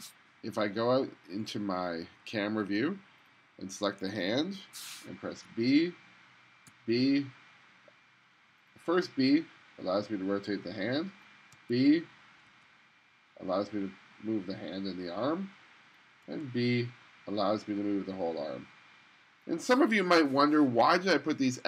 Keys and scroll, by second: 5.5 b, 6.7 b, 11.6 b, 12.5 b, 16.3 b.